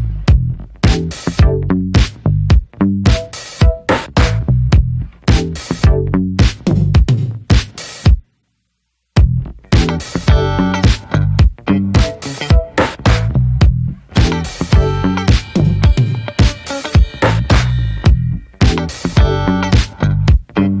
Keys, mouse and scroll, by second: 0.0 middle click, 0.1 scroll up 1, 0.2 scroll down 2, 0.5 middle click, 0.6 scroll up 1, 0.8 middle click, 1.1 scroll up 1, 1.3-2.0 shift+middle drag, 2.0-3.1 drag, 3.1 scroll down 9, 3.4 middle click, 3.5-3.8 scroll up 3, 3.6 shift+middle click, 4.6 click, 4.9 middle click, 5.2 ctrl+z, 6.2 scroll up 1, 6.4 middle click, 6.8 click, 7.3 middle click, 7.6 ctrl+z, 10.1 middle click, 10.7 click, 11.4 scroll down 2, 11.6 middle click, 12.2-13.6 scroll up 3, 12.4 middle click, 12.7 shift+middle click, 13.6-15.7 ctrl+drag, 15.7-16.3 scroll down 5, 16.3-18.0 shift+middle drag, 18.0-18.7 drag, 18.7 scroll down 8, 18.9 middle click, 19.1 scroll up 2, 19.2 middle click, 19.9-20.8 scroll up 3, 20.1 shift+middle click, 20.5 shift+middle click.